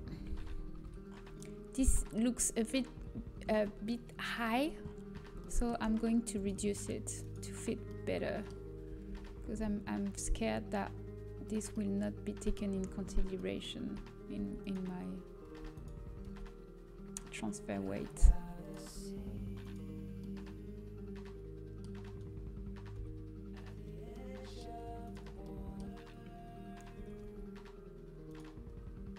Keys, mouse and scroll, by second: 1.1 h, 6.1 Tab, 6.6 Tab, 8.8 g, 11.7-13.3 middle drag, 13.7 z, 14.3 z, 15.4 z, 16.0 g, 18.8 z, 19.6-21.3 middle drag, 21.3 middle click, 23.8 l, 24.1 middle click, 25.4 middle click, 26.9 s.